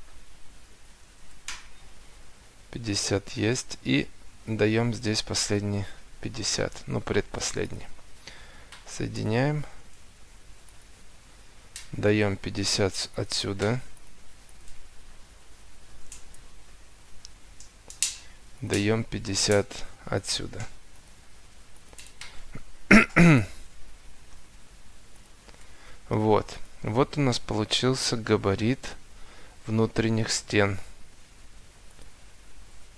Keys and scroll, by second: 0.8 5, 1.2 Return, 2.3 Escape, 4.3 Escape, 5.9 Delete, 11.0 Escape, 15.8 5, 16.0 0, 16.3 Return, 17.8 Escape, 22.8 5, 23.3 Return, 24.2 Escape, 32.3 Escape.